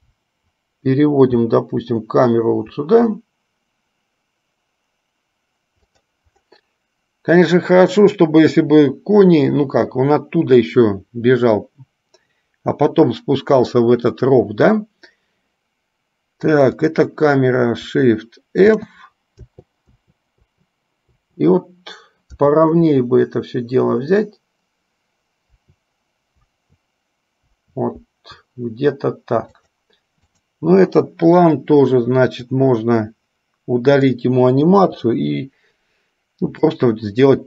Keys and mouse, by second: 17.0 click, 18.9 shift+f, 30.5 click, 32.6-34.2 drag, 34.7 Delete, 37.0-37.4 drag.